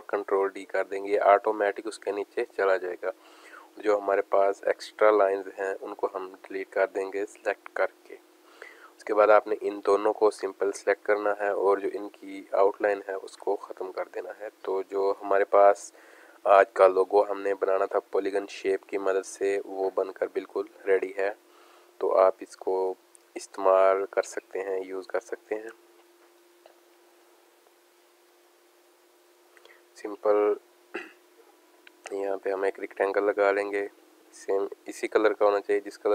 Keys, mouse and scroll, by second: 0.6 ctrl+d, 4.0 click, 9.8 click, 11.9 click, 12.9 click, 14.1 alt+scroll down 1, 14.5 space, 14.6 click, 15.0 space, 17.6 click, 19.0-22.4 drag, 22.8 click, 23.2 space, 23.3 click, 28.3 right click, 29.3 click, 32.1 click.